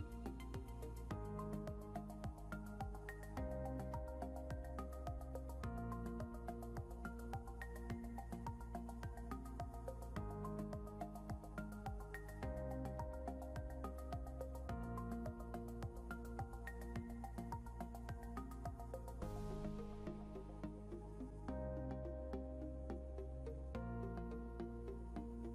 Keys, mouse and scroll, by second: 10.0-12.5 typing, 14.4 shift+v, 19.6-22.3 typing, 23.8 Return.